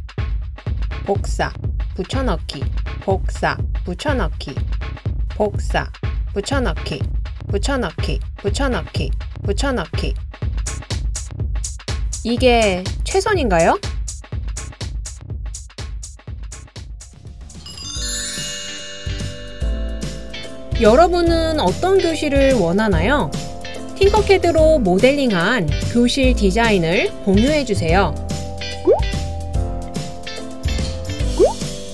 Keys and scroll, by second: 1.3 super+o, 3.7 super+o, 4.0 super+o, 4.1 super+o, 7.4 super+o, 8.3 super+o, 9.2 super+o, 15.0 o.